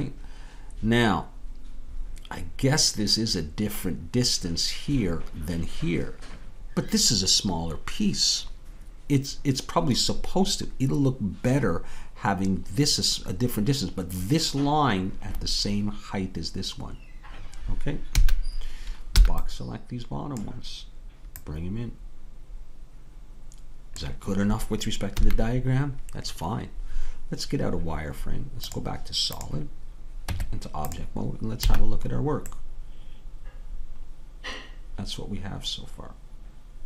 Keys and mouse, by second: 18.2 a, 21.4-22.6 drag, 25.2 a, 28.7-30.3 drag, 30.3 Tab, 31.7 a.